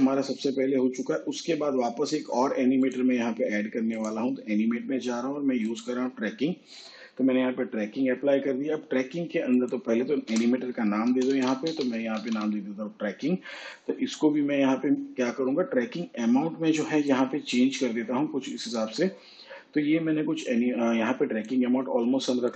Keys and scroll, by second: 0.0-1.0 typing, 1.6 Return, 12.0 Return, 12.8-14.5 typing.